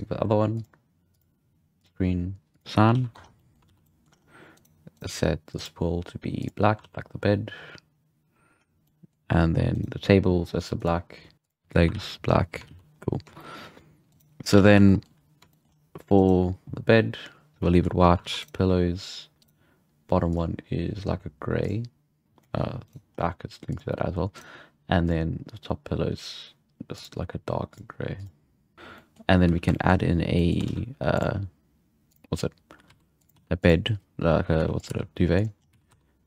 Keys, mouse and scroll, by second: 0.5-2.9 drag, 2.9 alt+a, 3.1 Tab, 3.2 scroll down 2, 3.3 middle click, 3.6 alt+a, 3.9 middle click, 4.0-4.5 scroll up 3, 4.5 right click, 5.5-6.8 drag, 6.8 alt+a, 8.6 scroll down 4, 8.8-9.2 middle drag, 9.2-9.7 scroll up 4, 9.7-10.7 right drag, 10.7-11.9 drag, 11.9 alt+a, 12.3-12.6 scroll down 5, 12.6 alt+a, 12.9-13.3 scroll up 4, 13.3 shift+middle drag, 13.6-14.1 scroll down 3, 14.1-14.5 right drag, 14.5 alt+a, 14.8-15.1 shift+middle drag, 15.1-15.5 scroll down 2, 15.5 shift+middle click, 15.6-16.1 scroll up 3, 16.1-17.7 right drag, 17.7-18.0 shift+middle drag, 18.0 scroll up 4, 18.2 alt+a, 18.4-20.3 right drag, 20.3-22.2 drag, 22.9 right drag, 23.1-23.7 scroll down 1, 23.7 click, 24.3 right click, 25.0-28.7 drag, 28.7 scroll down 3, 28.9-29.5 middle drag, 29.4 z, 29.7 shift+middle click, 29.8-30.3 scroll up 1, 30.3-32.1 middle drag, 30.6 shift+a, 32.3-32.9 scroll down 1, 32.9 s, 33.3 g, 34.5 s, 34.9 g, 35.6-36.2 scroll up 4, 35.7 s.